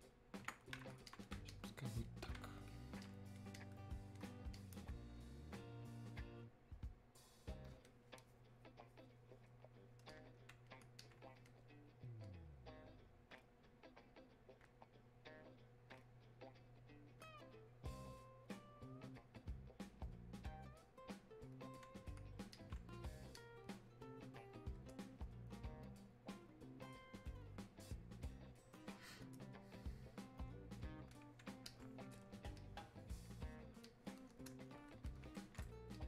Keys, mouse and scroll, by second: 10.1-36.0 drag.